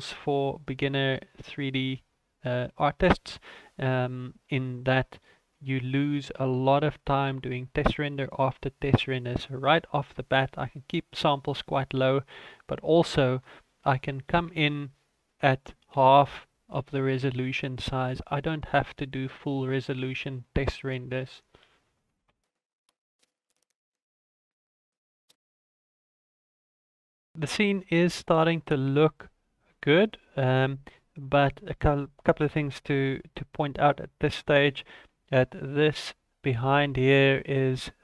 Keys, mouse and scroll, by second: 0.2-1.0 scroll up 4, 1.0 click, 1.8-3.7 scroll up 5, 11.8 click, 13.3 click, 18.1 ctrl+s, 19.1 shift+middle click, 22.4 F12.